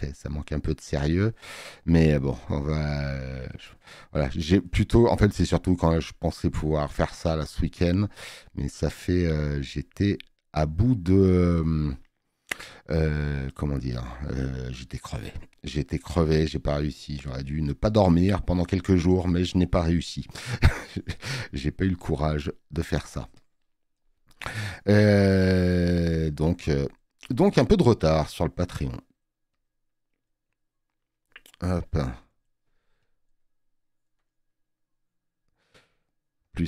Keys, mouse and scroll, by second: 23.4 click.